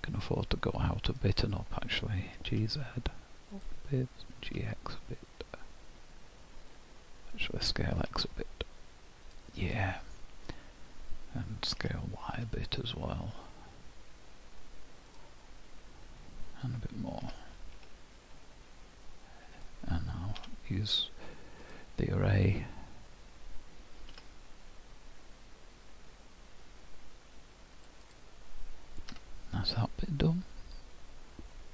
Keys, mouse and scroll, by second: 1.1 click, 2.4 g, 4.3 g, 8.0 s, 9.7 middle click, 11.8 s, 17.2 s, 20.4 q, 28.1 click, 29.1 h, 29.7-30.2 scroll down 2, 30.2 middle click.